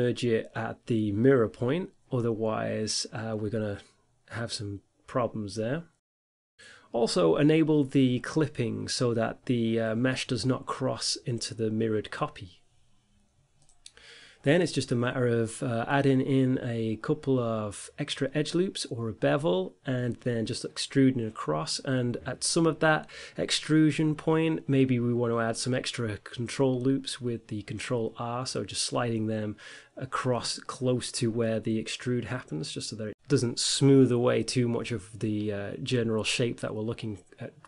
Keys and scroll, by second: 0.0 e, 2.3 x, 7.7 x, 11.4 g, 12.4 ctrl+r, 17.2 Tab, 18.8 Tab, 19.6 Tab, 20.7 Tab, 21.1 5, 21.5 1, 23.5 g, 24.1 ctrl+b, 27.3 e, 27.7 x, 28.4 g, 29.0 ctrl+r, 29.9 ctrl+r, 31.8 Tab, 34.3 Tab, 35.7 ctrl+r.